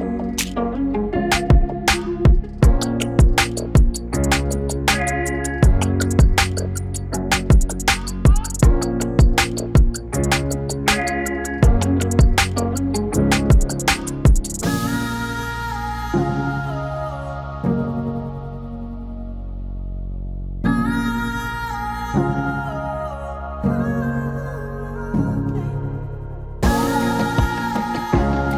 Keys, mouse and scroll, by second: 23.5-26.3 drag, 26.3 space.